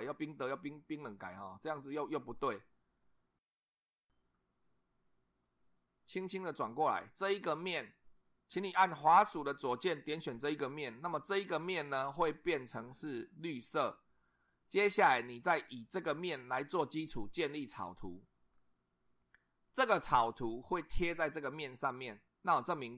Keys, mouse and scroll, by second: 4.0 click, 5.5-7.1 middle drag, 9.9 click, 18.6 click.